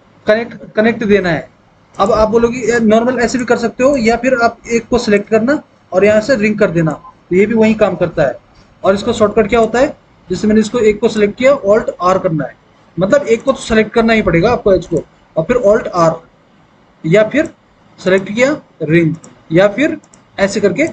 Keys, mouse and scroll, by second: 12.6 alt+r, 16.3 alt+r.